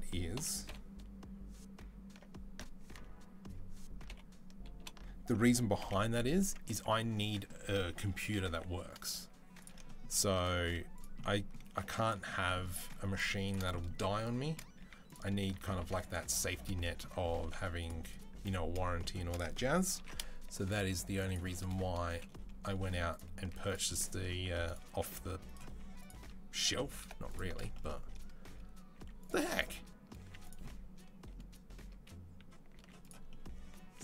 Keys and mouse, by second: 0.2 ctrl+l, 0.5 ctrl+u, 0.5 ctrl+i, 2.7 ctrl+z, 3.9 ctrl+l, 4.6 ctrl+i, 5.6 h, 6.2 Tab, 6.5 Tab, 8.3 2, 8.9-18.7 alt+middle drag, 10.4 z, 14.6 z, 15.6 ctrl+r, 17.2 ctrl+r, 19.8 ctrl+b, 21.9 Delete, 23.2 z, 24.2 z, 25.7-26.9 alt+middle drag, 26.9 alt+shift+click, 27.3-34.0 middle drag, 28.8 z, 30.0 z.